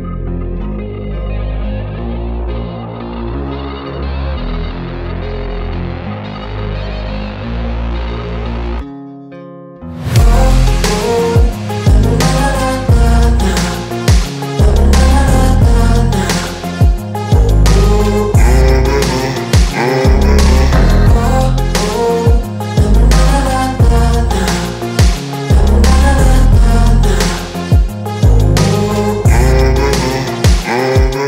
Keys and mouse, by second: 2.3 Tab, 4.2 click, 9.4 click, 14.7 shift+Tab, 15.7 click, 20.5 shift+Tab, 21.7 click.